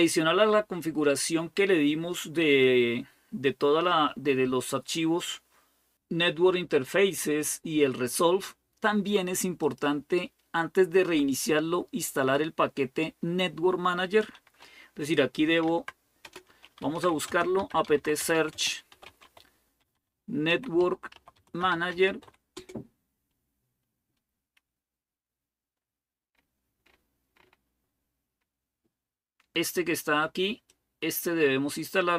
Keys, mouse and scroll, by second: 9.4-15.4 drag, 15.4-22.7 typing, 25.6-27.7 scroll up 1, 27.7-28.9 scroll up 1, 30.5-32.1 drag.